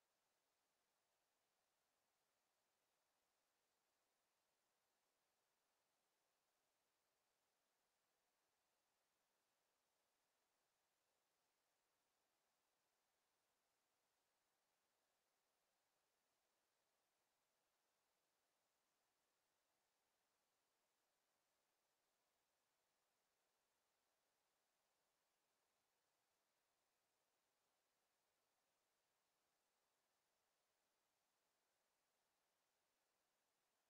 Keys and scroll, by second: 3.3 ctrl+z, 20.5 ctrl+z.